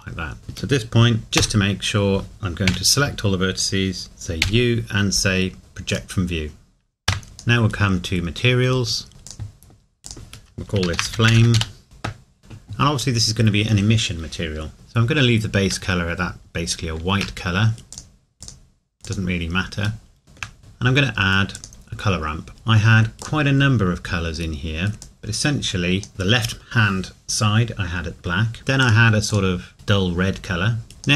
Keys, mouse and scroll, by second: 2.7 a, 4.4 u, 7.7-8.5 scroll down 1, 9.1 click, 12.4-12.7 scroll up 1, 14.7 shift+middle click, 17.9 click, 20.0 shift+middle click, 20.6-21.5 scroll up 1, 21.5 click, 28.8 click.